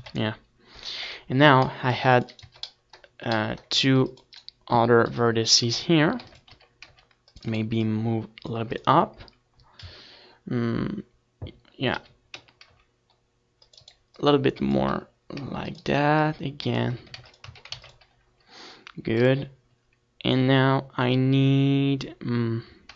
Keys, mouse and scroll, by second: 1.7 KP_7, 2.8 s, 5.9-8.0 drag, 6.2 a, 6.8 c, 9.0-10.8 right drag, 9.1 s, 11.0-13.6 drag, 12.4 s, 14.1 click, 14.3 a, 14.8-16.4 drag, 16.5 ctrl+s, 17.7 KP_1, 18.5 ctrl+r, 19.1-20.9 right drag, 19.1 a, 19.3-20.9 middle drag, 20.6 ctrl+r, 21.8 KP_1, 22.2 a.